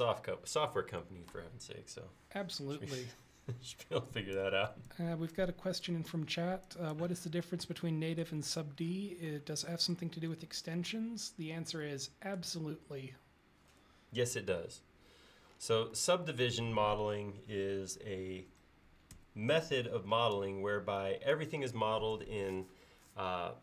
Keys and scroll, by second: 3.8 e, 19.2 space.